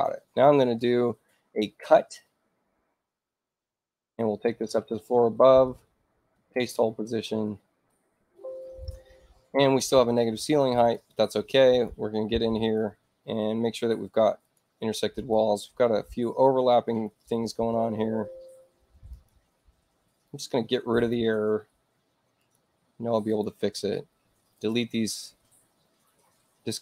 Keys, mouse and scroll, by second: 4.4 shift+u, 5.6 ctrl+alt+shift+c, 10.1 click, 11.6 click, 13.8 space, 14.3 click, 15.1 click, 17.2 click, 20.2 click, 20.8 click, 22.3 click, 23.2 click, 24.5 click, 26.6 click.